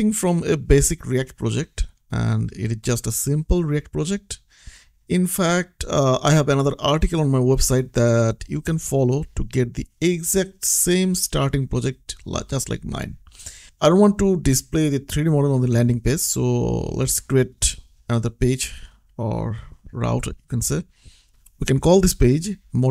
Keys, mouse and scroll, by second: 0.8 middle click, 2.3-4.3 scroll down 1, 4.7 click, 7.8 middle click, 8.7 click, 10.8 scroll down 1, 12.4 middle click, 19.1 right click, 21.1 click, 22.5-22.9 typing.